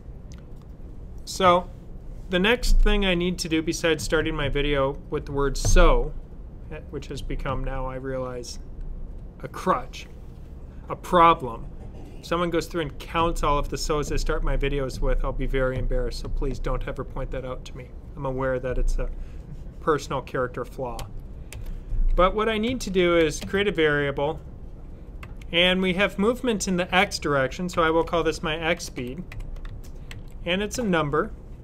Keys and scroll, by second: 22.6-23.8 typing, 27.4-30.6 typing.